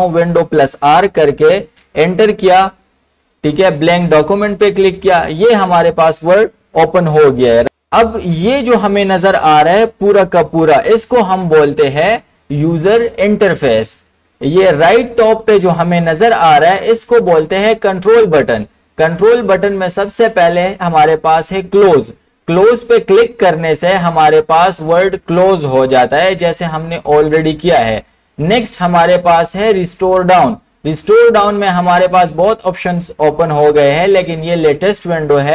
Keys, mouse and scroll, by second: 0.6 super+r, 1.8 Return, 4.2 Return, 4.3 click.